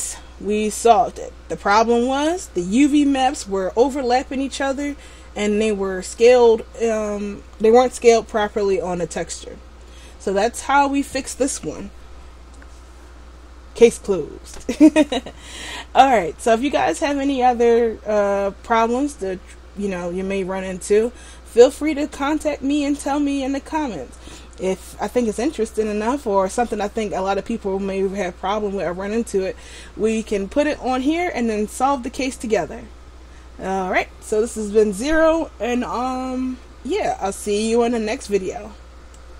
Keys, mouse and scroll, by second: 0.9 shift+middle click.